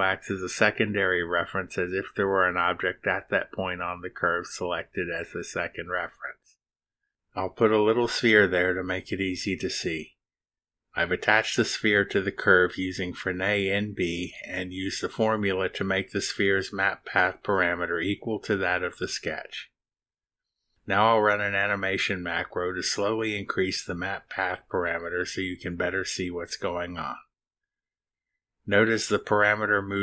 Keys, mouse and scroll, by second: 8.8 click, 10.3 space, 20.6 click, 21.8 click, 22.9 click.